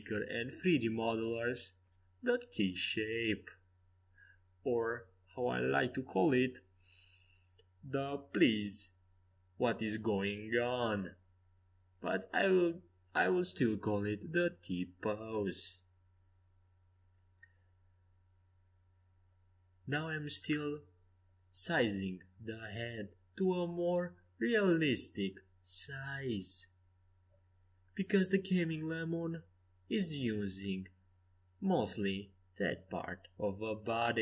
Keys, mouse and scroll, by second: 0.7 s, 6.0 r, 9.0 h, 10.3 ctrl+z, 12.5 a, 17.6 c, 19.6 a, 20.6-22.3 drag, 21.1 c, 23.6 g, 24.9 s, 25.9 g, 28.2 a, 28.8 c, 31.0 s, 33.3 g.